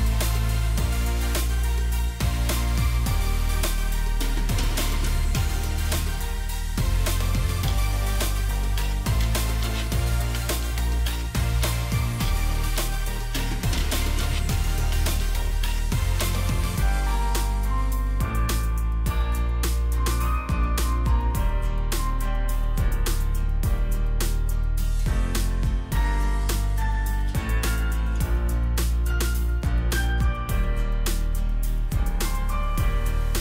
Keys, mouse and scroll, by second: 0.9 right click, 6.3 shift+click, 10.8 shift+click, 16.7 shift+click, 24.7 shift+click, 31.9 ctrl+g, 33.3 shift+click.